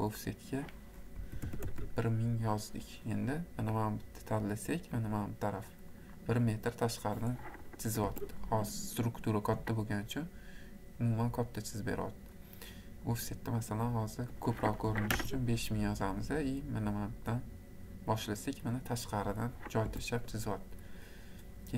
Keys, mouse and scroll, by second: 0.4 click, 1.0-1.9 typing, 4.9 click, 6.1-6.8 scroll, 6.5 middle click, 6.6 middle click, 8.1 Escape, 8.3-8.7 scroll, 11.7-13.2 scroll, 13.2 scroll, 14.5 click, 15.2 5, 17.4 click, 19.2 click, 19.9 Escape.